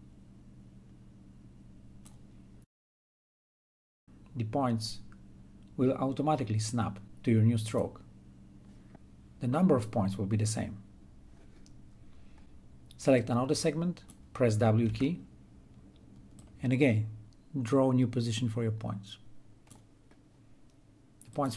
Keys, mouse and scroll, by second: 8.2-13.2 drag, 14.6-16.2 drag, 16.2 w, 17.8-21.5 drag.